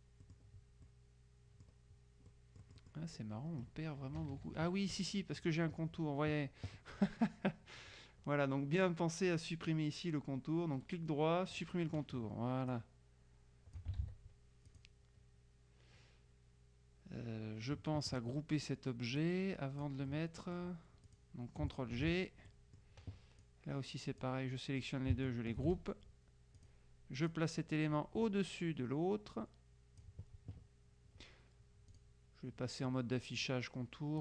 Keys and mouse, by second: 0.3-2.2 drag, 2.4-3.5 drag, 4.2 KP_Subtract, 10.8 right click, 11.6 click, 12.8-14.3 drag, 14.1 ctrl+z, 14.8 click, 19.3-20.5 drag, 21.2 click, 22.0 ctrl+g, 22.6 ctrl+click, 23.5 click, 25.7 ctrl+g, 26.7 click, 27.4-30.6 drag, 32.0 click.